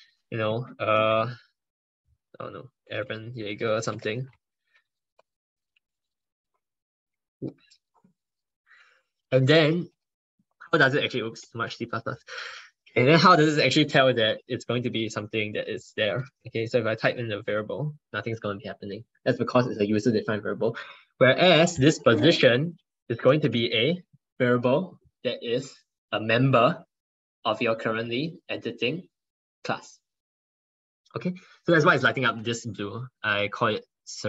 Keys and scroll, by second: 4.2 ctrl+BackSpace, 9.3 ctrl+space, 14.6 ctrl+BackSpace, 22.1 ctrl+BackSpace.